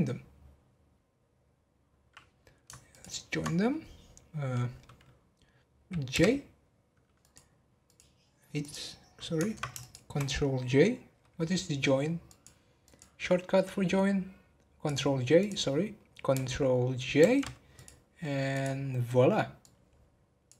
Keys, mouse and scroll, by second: 2.9 ctrl+click, 7.2 click, 7.8 click, 8.6 click, 9.8 shift+click, 12.8-15.4 drag, 17.7 click, 18.5 click.